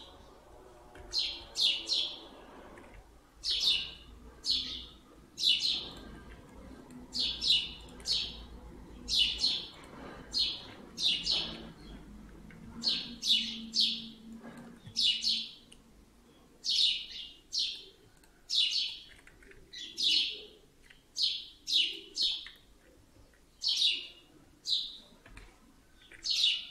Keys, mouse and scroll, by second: 0.8 KP_1, 3.3 r, 6.3 alt+middle click, 7.7 click, 9.6 click, 11.0 shift+click, 11.2 f, 11.4 f, 11.8 f, 12.4-12.7 scroll down 4, 12.6 Tab, 13.2-14.0 scroll down 2, 14.2 middle click, 14.7-16.4 scroll up 7, 14.8 Tab, 16.6 click, 17.6 click, 18.1 shift+click, 18.7 click, 19.2 s, 22.6 Tab, 22.8-24.3 scroll down 6, 23.1 Tab, 24.3-25.2 scroll up 2, 25.2 scroll up 1, 25.2 KP_7, 25.9 s.